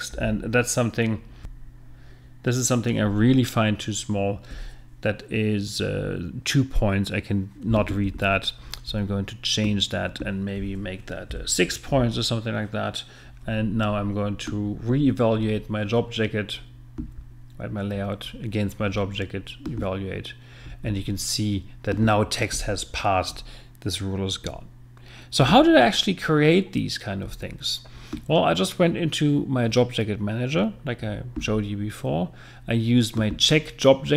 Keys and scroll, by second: 1.4 F9, 11.3 6.